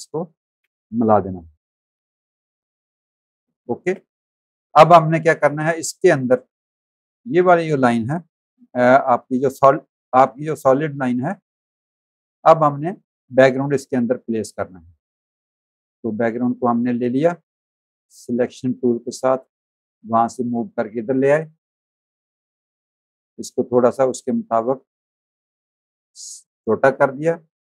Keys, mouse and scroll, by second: 0.6 space, 0.7 click, 1.7 click, 3.4 space, 3.5 click, 4.3 v, 4.5 click, 5.3 click, 6.0 click, 7.2 ctrl+z, 7.5 click, 9.1 click, 12.1 click, 13.1 click, 13.9 click, 17.1 click, 20.6 click, 23.0 click, 26.9 click.